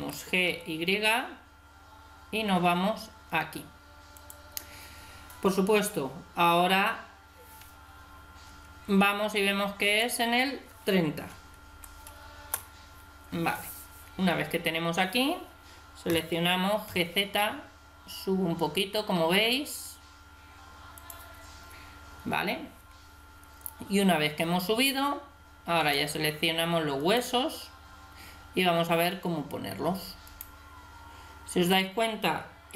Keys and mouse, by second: 0.3 middle click, 9.9-11.7 drag, 11.7 middle click, 16.1 g, 25.9 right click.